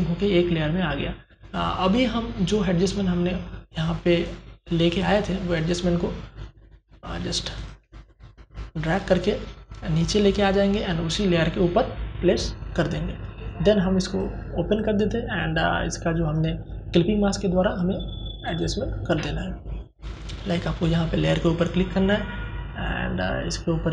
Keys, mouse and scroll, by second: 0.8-2.3 scroll up 1, 3.1-13.1 drag, 13.1-17.4 drag.